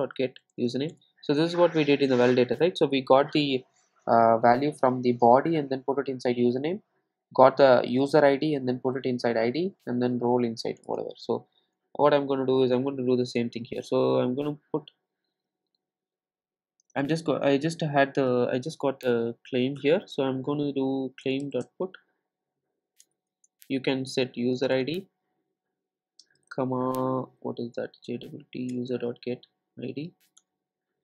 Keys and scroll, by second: 10.8 super+e, 21.3 Return, 28.7 Return.